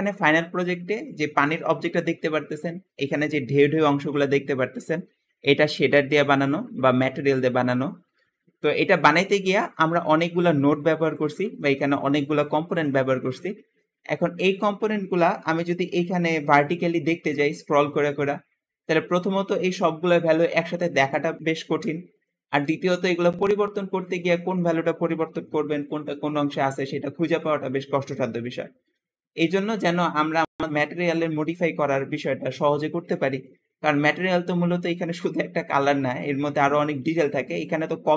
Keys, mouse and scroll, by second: 0.9 g, 1.0 g, 9.0 middle click, 10.7 middle click, 10.7-11.4 scroll down 2, 11.0 click, 11.3 g, 11.6 click, 12.5 g, 13.0-14.0 middle drag, 13.0-13.8 scroll down 2, 14.4-14.8 middle drag, 14.4-14.8 scroll up 2, 14.8-15.9 scroll down 4, 15.9-16.2 scroll up 2, 16.2-19.3 scroll down 2, 19.3 scroll down 1, 19.4-22.2 scroll up 2, 22.2-24.5 scroll down 4, 27.2-30.3 scroll down 2, 27.8-33.8 middle drag, 30.3-31.8 scroll up 2, 31.8-32.5 scroll down 2, 32.5 scroll up 2, 32.8-33.8 scroll down 2, 33.8 scroll up 2, 34.1 middle click, 34.6-35.3 scroll up 2, 36.4 middle click, 36.9-38.0 scroll down 2.